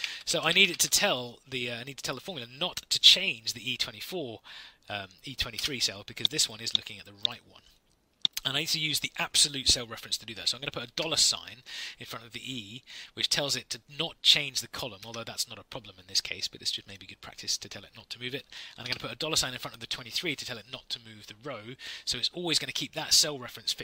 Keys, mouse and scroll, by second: 5.5 Return, 10.4 shift+Return, 10.8 shift+4, 15.0 Right, 18.7 shift+4.